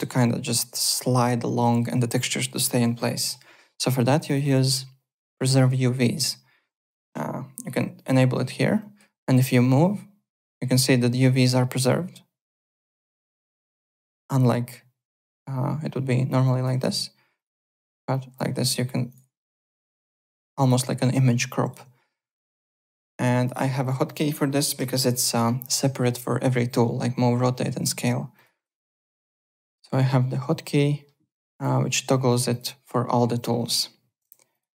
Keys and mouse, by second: 4.1 click, 7.9 click, 8.8 click, 9.4 click, 13.2 ctrl+z, 13.8 click, 14.3 click, 17.3 click, 18.1 click, 19.1 click, 20.6 click, 21.1 click, 22.7 click, 23.4 click, 23.6 `, 23.8 click, 24.7 Home, 28.3 click, 31.5 click, 32.5 click, 34.5 click.